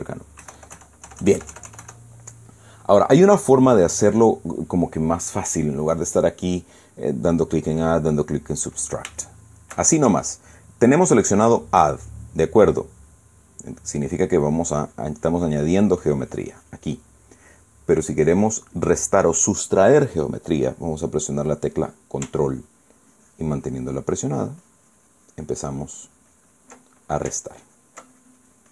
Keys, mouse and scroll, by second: 1.1 KP_Add, 2.6 click, 4.1 click, 9.9 shift+middle click, 10.5 shift+click, 10.6-11.0 shift+scroll up 1, 15.1 click, 15.6 click, 16.7 click, 23.7-27.5 ctrl+drag, 28.1 ctrl+click.